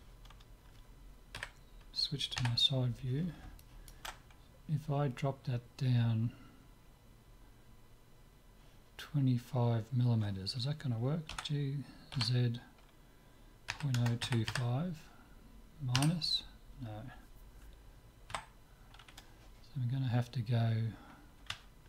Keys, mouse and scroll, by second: 1.4 KP_1, 2.4 KP_3, 3.6-5.6 middle drag, 11.3 g.